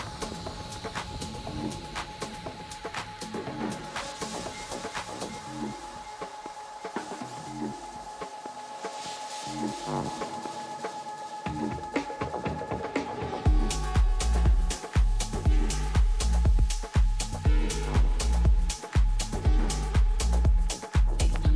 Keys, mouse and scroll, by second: 0.6-2.4 middle drag, 1.4 Tab, 2.3 a, 3.7 a, 4.2 Tab, 4.6 Tab, 4.9 Tab, 5.5-8.2 middle drag, 9.4 z, 11.4 middle click, 16.7 Tab, 19.3 z, 21.2 a.